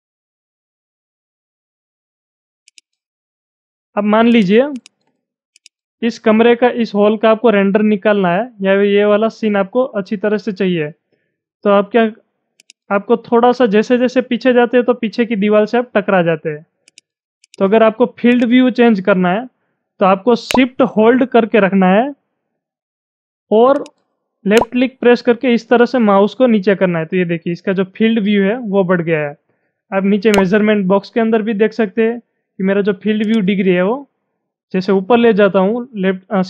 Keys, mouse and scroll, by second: 0.3 scroll down 2, 0.8-2.7 middle drag, 2.7-4.4 drag, 4.8 click, 5.7-9.0 drag, 12.6-16.9 drag, 17.5 click, 18.5-21.2 drag, 22.1-30.1 drag, 32.6 shift+click, 33.2-36.4 shift+drag.